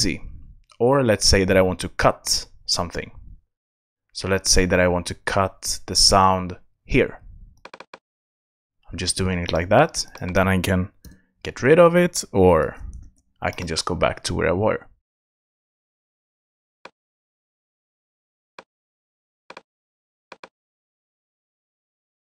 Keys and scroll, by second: 11.0 BackSpace, 12.6 super+z.